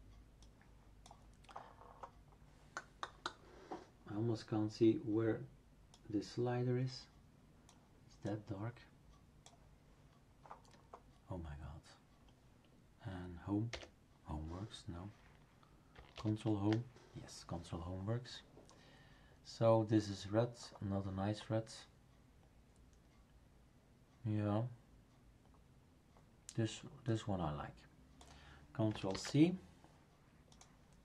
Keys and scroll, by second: 13.7 Home, 16.2 ctrl+Home, 29.1 ctrl+c.